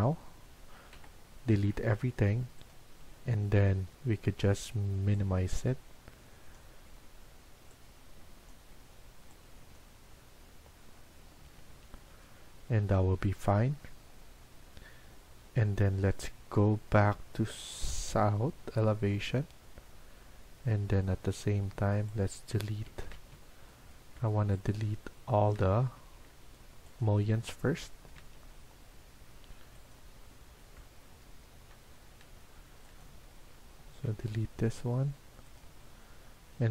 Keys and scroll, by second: 0.9 Delete, 11.4 Escape, 11.6 Escape, 19.2 Escape, 22.7 Escape, 23.1 Escape, 25.5 Escape, 25.9 Escape, 28.1 Escape, 34.1 Delete, 35.5 Delete.